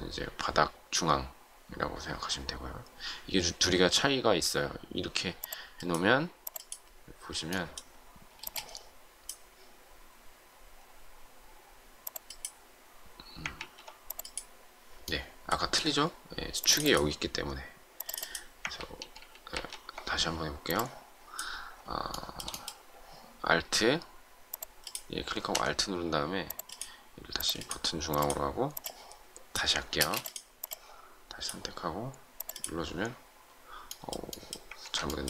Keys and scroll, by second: 8.4 space, 13.5 ctrl+z, 18.6 ctrl+z, 29.9 space, 34.7 ctrl+z.